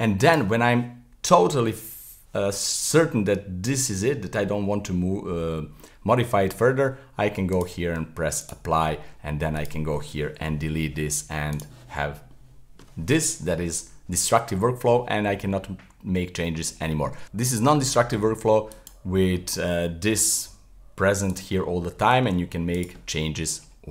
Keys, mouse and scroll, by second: 0.3 right click, 5.5-7.5 middle drag, 7.5-9.5 drag, 9.5 right click, 10.4 Delete, 11.5 click, 12.3-17.0 middle drag, 17.2 z, 18.7 click, 19.3-20.4 middle drag, 20.4 g, 21.6-22.3 middle drag, 22.3 s, 23.0-23.9 middle drag.